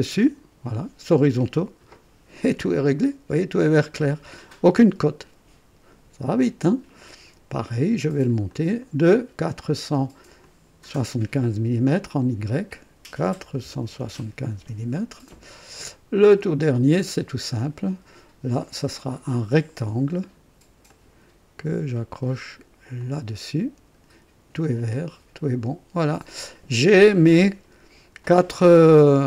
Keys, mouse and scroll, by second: 0.1 h, 6.2 click, 8.5 click, 10.4 click, 11.9 click, 13.4 KP_4, 13.8 KP_7, 13.8 KP_5, 14.5 KP_Enter, 16.2 click, 17.5-17.8 scroll up 2, 19.0 click, 20.8 click, 23.0 click, 24.9 click, 26.8-27.2 scroll up 1, 27.3 right click, 28.2-29.2 drag.